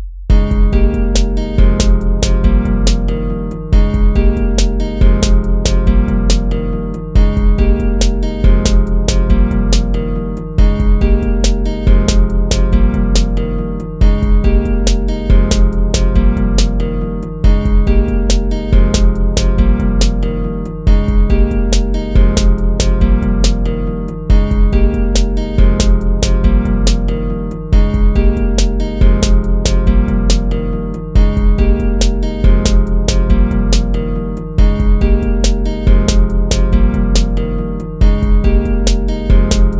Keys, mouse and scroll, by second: 1.6 ctrl+-, 2.2 ctrl+-, 2.4 ctrl+-, 2.7 ctrl++, 4.3 ctrl+-, 7.3 ctrl+z, 7.7 ctrl+-, 8.0 ctrl++, 12.1 ctrl+-, 12.5 ctrl+-, 13.9 ctrl++, 17.2 ctrl+-, 17.6 ctrl++, 19.7 ctrl+-, 19.9 ctrl++, 21.6 ctrl+-, 27.2 ctrl+-, 30.3 ctrl+z, 34.8 ctrl++, 35.1 ctrl++, 38.9 ctrl+z, 39.2 ctrl+-.